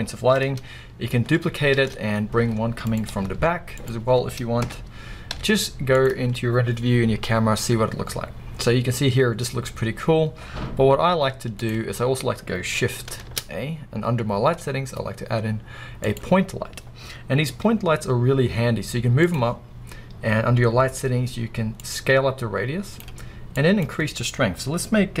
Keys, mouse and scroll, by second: 1.8 shift+d, 3.0 click, 3.1 r, 3.8 click, 4.6 KP_0, 5.3 z, 6.9 scroll up 1, 11.1 z, 11.8 scroll up 1, 13.3 shift+a, 17.4 g, 19.3 click, 21.8-25.2 drag.